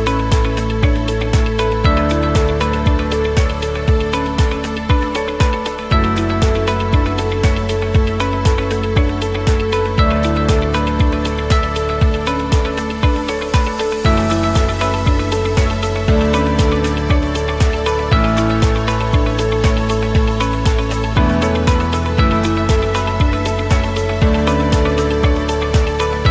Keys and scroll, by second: 1.2 space, 13.0 r, 17.1 p, 18.4 ctrl+z, 19.0-24.2 typing.